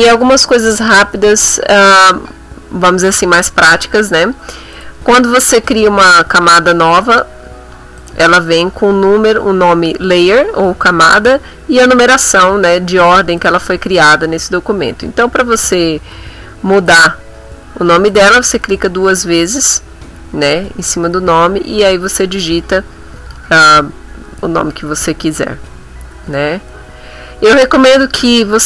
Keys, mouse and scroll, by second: 4.8 click, 8.0 click, 13.4 click, 16.8 click, 18.1 click, 22.9-24.7 typing, 26.3 0, 26.6 3, 26.8 Return.